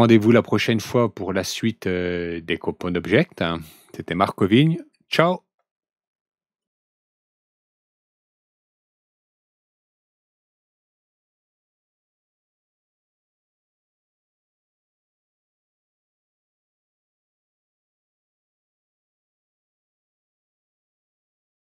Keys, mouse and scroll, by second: 6.5 click.